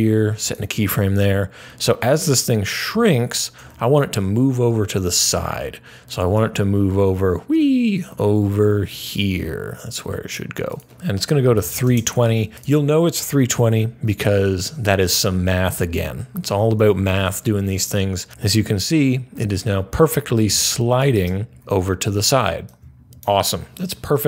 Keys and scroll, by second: 11.1-12.1 typing.